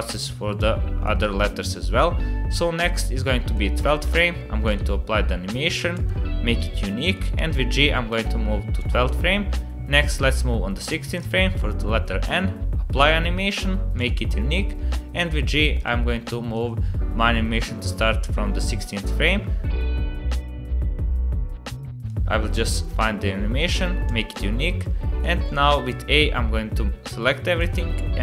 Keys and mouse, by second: 1.0-3.5 drag, 4.1 click, 7.1 g, 8.8-10.4 drag, 12.4 click, 13.9 click, 14.9 g, 16.5-20.2 drag, 21.0 click, 22.1 click, 24.8 click, 25.5 click, 26.2 g.